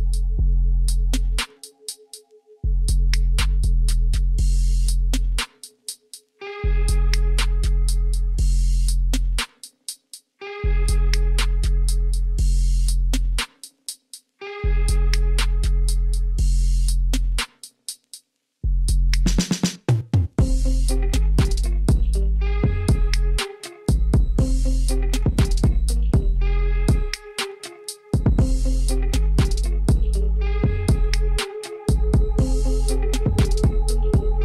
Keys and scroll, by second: 1.2 shift+z, 3.2 3, 10.2 x, 11.7 shift+z, 12.4 Tab, 34.1 Tab.